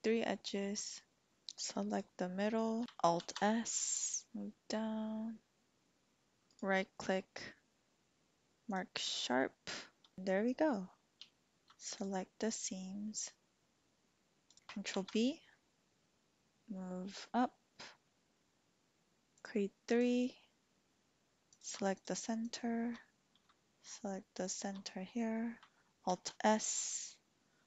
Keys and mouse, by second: 1.8 alt+shift+click, 3.7 alt+s, 6.4 typing, 6.5-8.8 drag, 11.3 shift+click, 11.6 shift+middle click, 11.6 alt+Tab, 11.9 alt+shift+click, 14.4 alt+shift+click, 14.8 ctrl+b, 19.3 click, 19.9 click, 21.5 click, 21.9 alt+shift+click, 24.3 alt+shift+click, 26.1 alt+s.